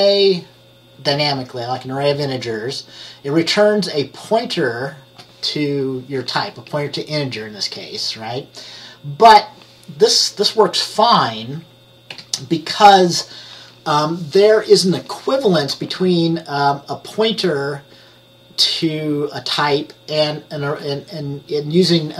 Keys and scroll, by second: 12.2 F10.